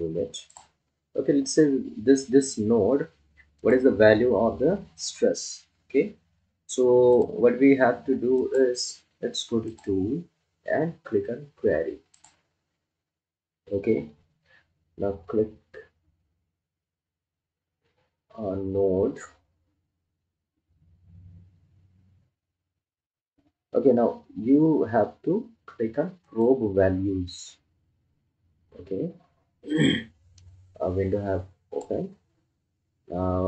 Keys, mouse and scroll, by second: 0.7 click, 3.7 click, 7.5 click, 26.8 click, 30.8-33.4 drag.